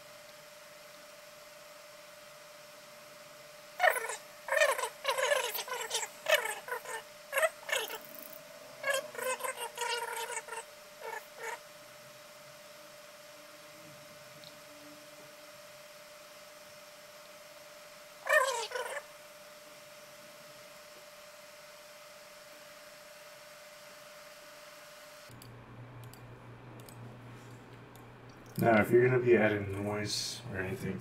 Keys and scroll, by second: 7.8 ctrl+z, 20.3-20.7 typing, 27.8-28.8 typing.